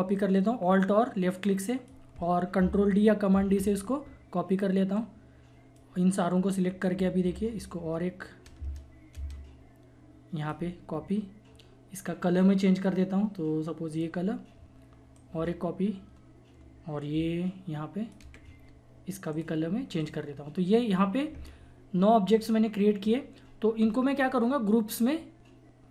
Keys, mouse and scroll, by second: 0.2-3.3 alt+drag, 3.3 ctrl+d, 4.9-6.8 drag, 6.8-12.9 alt+drag, 13.9 click, 15.1-21.3 alt+drag.